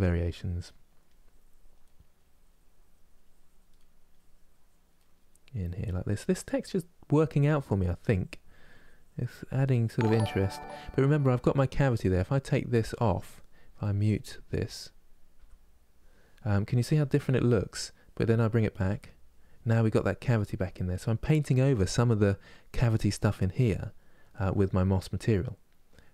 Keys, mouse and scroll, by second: 0.4 middle click, 0.8 click, 1.6 middle click, 1.9-3.5 drag, 3.5 middle click, 3.9 click, 4.7 middle click, 5.3 click, 6.2-7.3 middle drag, 7.3 click, 7.6-9.4 drag, 9.4 middle click, 9.7 click, 10.2-12.8 middle drag, 12.8 click, 13.9 click, 14.6 click, 15.1 m, 16.2-18.1 middle drag, 18.1 click, 18.5 m, 20.0 click, 20.4 m, 23.0-26.1 middle drag.